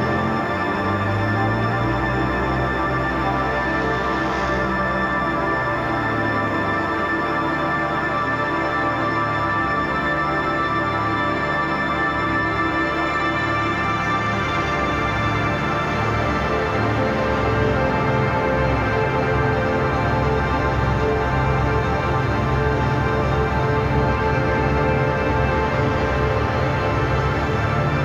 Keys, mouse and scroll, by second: 6.1-12.4 drag, 12.4-14.1 drag, 14.2 click, 15.9 click, 17.8 ctrl+y, 18.1 click, 18.9 ctrl+z, 19.5 ctrl+y, 20.4 click, 22.2 click, 22.4 space, 22.5 click, 22.6 space, 23.1-24.3 drag, 24.3 space, 24.4 click, 24.5 space, 25.0 click, 26.0 ctrl+y, 26.3-28.0 drag.